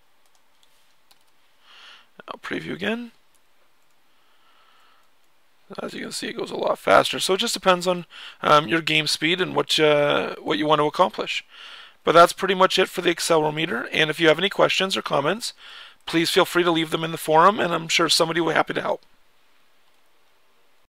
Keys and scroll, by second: 0.3-1.5 typing, 3.3 Down, 3.8-14.9 typing, 13.6 Right, 14.4 Right, 18.0-18.5 typing.